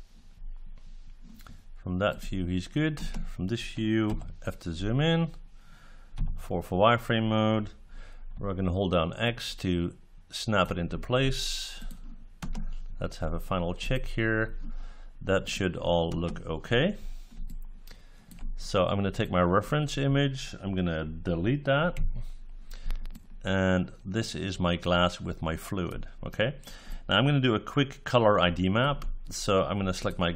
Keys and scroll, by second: 2.9 space, 12.3 space, 16.0 space, 21.9 Delete.